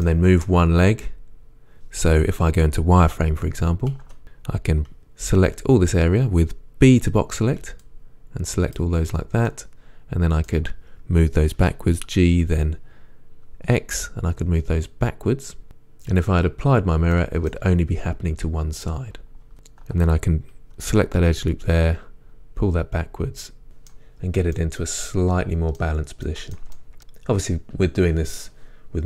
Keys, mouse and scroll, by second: 9.7-15.7 middle drag, 11.6 g, 16.2 click, 17.2-19.5 middle drag, 19.5 ctrl+z, 19.5-21.2 alt+drag, 21.2 g, 23.9-26.8 middle drag, 24.2-24.6 scroll down 2, 27.0-29.0 scroll up 1.